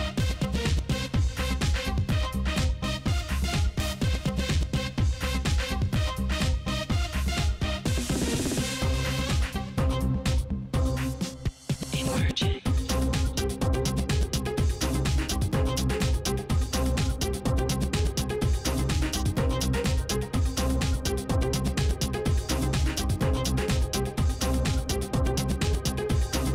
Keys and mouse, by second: 2.9 right click, 4.2-5.6 right drag, 4.8 shift+e, 6.1 ctrl+Tab, 6.7 right click, 7.4 j, 7.7 ctrl+Tab, 9.2 click, 9.3 right click, 9.8 click, 10.4 shift+e, 10.8 click, 11.4 click, 11.6 right click, 11.8 shift+e, 12.2 ctrl+Tab, 13.6-15.2 right drag, 15.7-17.4 middle drag, 18.0 KP_1, 18.4 KP_Decimal, 19.6 g, 24.0 g, 26.2 KP_7, 26.4 Tab.